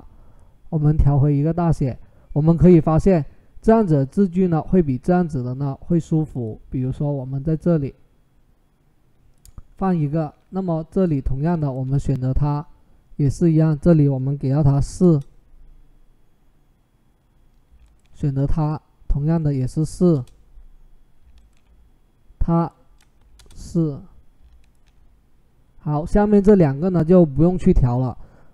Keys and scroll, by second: 14.6 4, 14.8 Return, 19.7 4, 19.9 Return, 23.0 4, 23.1 Return.